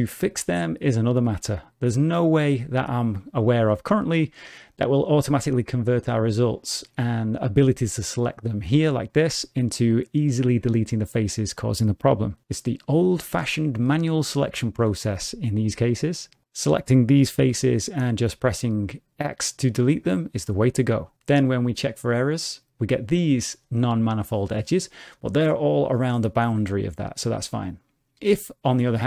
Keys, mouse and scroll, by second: 14.3 3, 15.6 click, 16.3 shift+click, 17.5 x, 22.4 click.